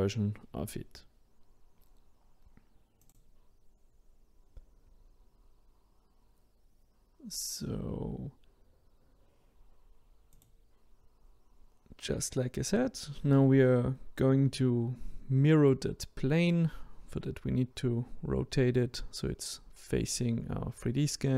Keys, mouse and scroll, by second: 0.9 s, 2.6-3.3 scroll down 2, 3.3-8.8 middle drag, 8.8 click, 9.8 click, 10.3 middle click, 11.1 click, 12.3 click, 15.0 click, 16.4 r, 18.3-20.4 middle drag, 20.4 click, 20.8-21.1 scroll up 4.